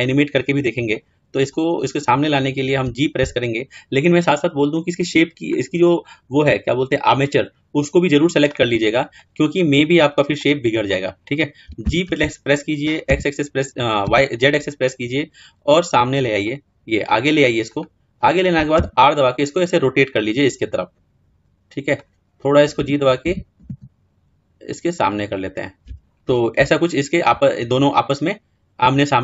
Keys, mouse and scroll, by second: 24.3 g, 25.5-29.2 middle drag.